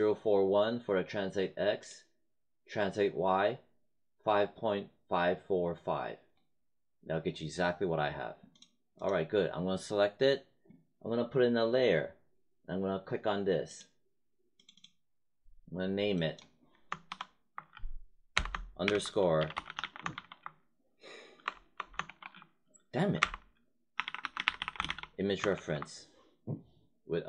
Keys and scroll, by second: 17.0 shift+=, 18.3-22.0 typing, 23.6-25.4 typing.